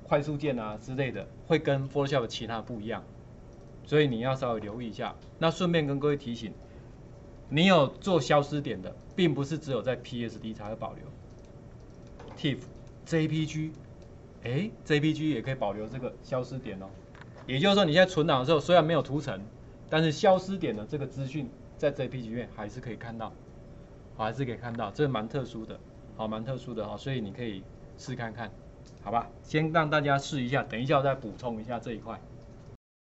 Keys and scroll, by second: 7.7 ctrl+1, 24.4 ctrl+1, 24.4 Escape.